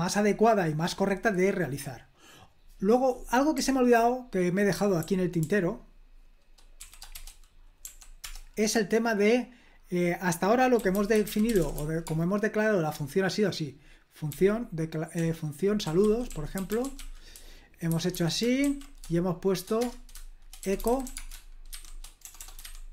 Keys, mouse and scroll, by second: 0.0-0.9 scroll down 1, 0.9-2.1 scroll down 1, 2.4 click, 3.5-5.4 typing, 6.8-8.2 typing, 10.5-12.2 typing, 14.3-18.6 typing, 19.8 Return, 20.4-22.9 typing.